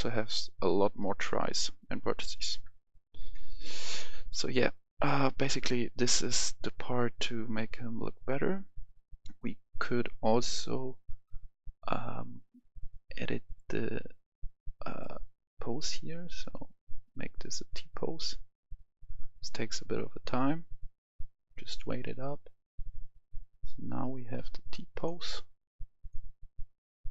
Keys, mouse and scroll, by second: 0.6 middle click, 2.5 KP_0, 3.2 KP_1, 10.0 click, 24.3-24.9 scroll down 1, 24.9 click, 25.3-26.0 scroll down 1, 26.0 click.